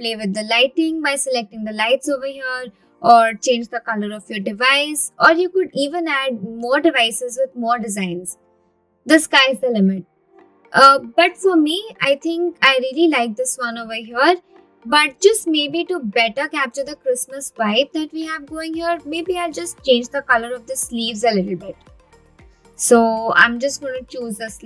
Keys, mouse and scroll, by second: 10.8 click, 11.3 scroll down 1, 12.1 click, 14.3 click, 16.1 scroll up 2, 23.2 click.